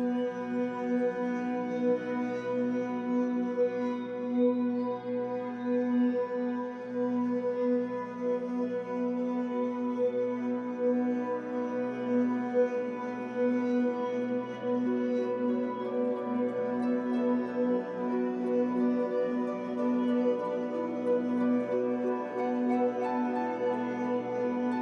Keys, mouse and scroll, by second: 1.6-2.2 scroll down 2, 2.2-19.9 middle drag, 3.8 scroll down 2, 4.3-5.0 scroll up 2, 5.0-5.4 scroll down 2, 6.3-6.6 scroll up 2, 7.7 scroll up 1, 10.1 scroll up 1, 10.4 scroll down 1, 11.5 scroll down 1, 12.7-13.2 scroll up 1, 15.3 scroll up 2, 16.1 scroll up 2, 16.9 scroll down 2, 18.9-19.9 scroll up 2, 19.9 click, 20.1-21.7 shift+middle drag, 21.3 f, 21.7 click, 22.6-24.8 drag.